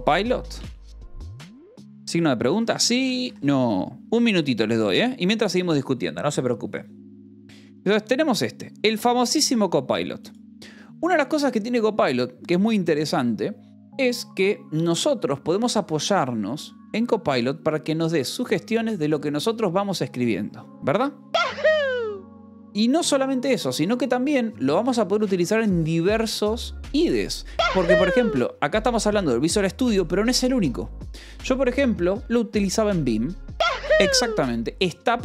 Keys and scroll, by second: 0.0-3.6 typing, 2.0 Tab.